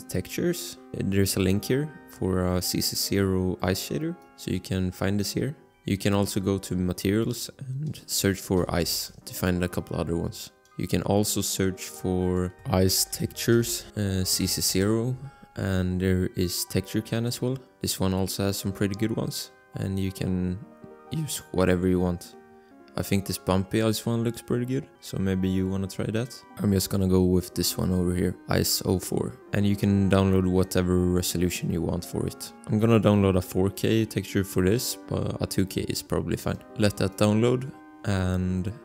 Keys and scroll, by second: 8.7 c, 8.9 Return, 12.7-14.4 typing, 14.7 Return.